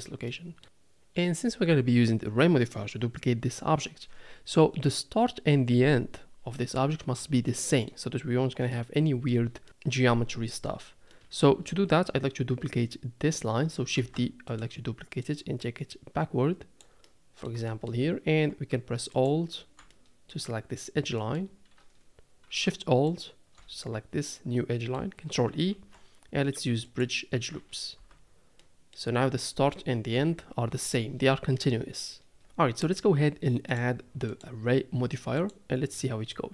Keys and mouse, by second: 0.3 click, 7.5 middle click, 8.7 middle click, 8.9 click, 11.1 middle click, 14.0 shift+d, 15.3-16.8 drag, 17.0 middle click, 17.7 shift+middle click, 19.9 middle click, 21.2 middle click, 23.1 alt+shift+click, 24.8 click, 25.7 ctrl+e, 27.9 Tab, 28.6-28.9 drag, 30.2 KP_7, 34.3-35.5 drag, 36.3-36.5 middle drag.